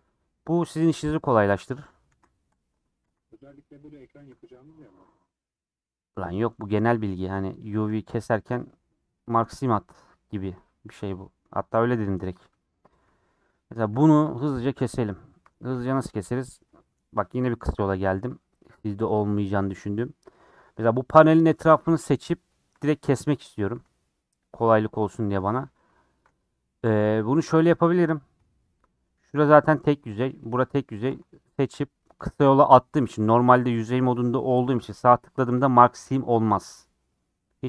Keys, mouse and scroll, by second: 0.3-1.7 scroll up 4, 1.7 Tab, 2.5 ctrl+a, 2.7 Tab, 4.3 3, 4.5 click, 7.9-9.2 drag, 9.2-10.5 right drag, 10.5-11.8 middle drag, 11.8 scroll up 2, 12.3 scroll down 4, 12.6 middle click, 12.8 scroll up 2, 13.2 scroll down 4, 13.3 middle click, 13.8 scroll up 3, 15.6-18.9 middle drag, 18.9 click, 19.4 middle click, 19.6 scroll up 2, 19.8 middle click, 20.2 Tab, 20.4 scroll down 6, 20.5 middle click, 20.8 scroll up 4, 21.9 middle click, 22.3 Tab, 22.9 Left, 24.2 scroll up 4, 24.6 middle click, 24.9 scroll down 3, 25.1 middle click, 25.5 click, 26.5 middle click, 26.8 scroll down 2, 27.1-29.0 middle drag, 29.0 click, 29.7-31.0 middle drag, 31.0 shift+click, 31.2-37.6 middle drag.